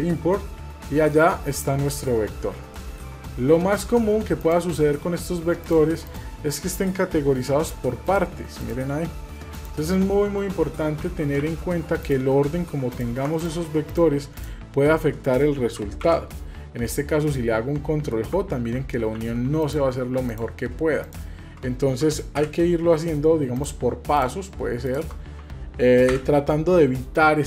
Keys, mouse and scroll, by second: 0.8 middle drag, 1.3-2.6 scroll up 6, 1.9 shift+middle click, 2.8 shift+middle drag, 3.2-3.5 scroll up 3, 3.6-4.0 shift+middle drag, 4.4 click, 5.0-5.4 scroll down 2, 5.6 click, 6.0 click, 7.3 g, 8.6 click, 8.9 g, 10.6 ctrl+z, 11.0 ctrl+z, 11.7 ctrl+z, 12.0 click, 12.9 click, 13.4 shift+click, 13.9-14.4 shift+drag, 16.0 ctrl+j, 17.4-18.1 middle drag, 18.7 ctrl+z, 19.2 ctrl+z, 19.6 click, 20.3 click, 21.0 shift+click, 22.4 ctrl+j, 23.5 drag, 24.1 click, 24.8 shift+click, 26.1 ctrl+j.